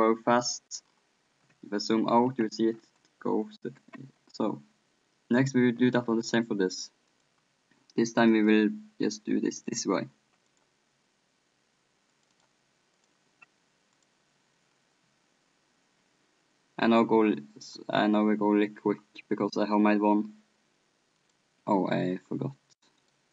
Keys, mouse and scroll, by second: 0.0 p, 4.0 p, 5.4-7.1 right drag, 7.1-15.9 drag, 18.1-19.7 middle drag, 19.7-22.8 drag, 22.8-23.3 middle drag, 23.0 click.